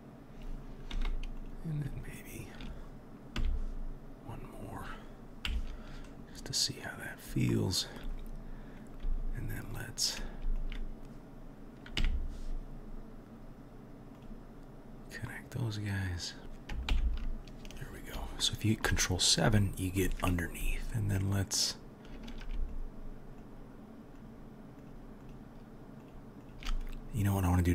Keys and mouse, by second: 0.9 2, 1.4 click, 1.5-2.0 middle drag, 2.0 shift+click, 2.1-2.4 shift+middle drag, 2.4 shift+drag, 2.6-8.5 middle drag, 3.4 e, 5.5 KP_3, 9.1 1, 9.7 click, 12.0 m, 18.5 shift+click, 18.9 middle click, 19.5-20.1 shift+drag, 20.1-22.7 middle drag, 22.7 shift+click, 22.8-23.4 shift+middle drag, 23.4 shift+click, 23.5-24.2 shift+middle drag, 24.2-24.9 shift+drag, 24.9-26.0 shift+middle drag, 26.0 shift+click, 26.1-27.7 shift+middle drag.